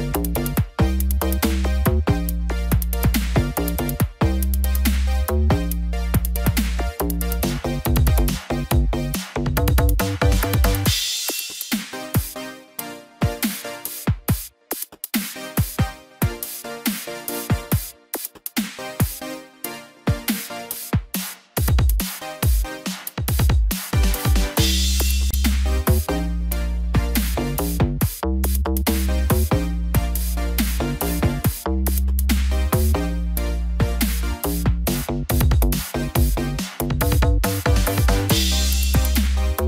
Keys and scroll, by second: 5.9 ctrl+-, 6.6 ctrl+0, 32.3 ctrl+t, 35.2 ctrl+=, 35.4 ctrl+-, 36.9 ctrl+=.